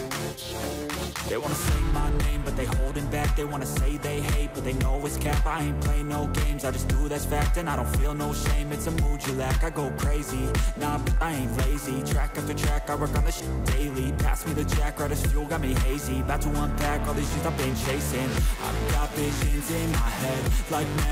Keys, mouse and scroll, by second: 1.3 right click, 4.4 right click, 8.3 ctrl+j, 11.2 ctrl+j, 12.6 shift+click, 14.1 right click, 17.3-18.0 scroll down 8, 19.4 ctrl+j.